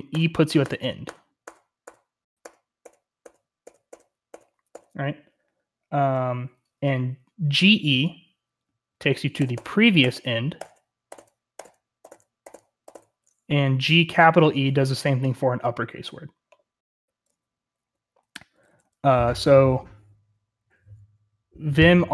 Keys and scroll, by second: 0.0-22.1 typing.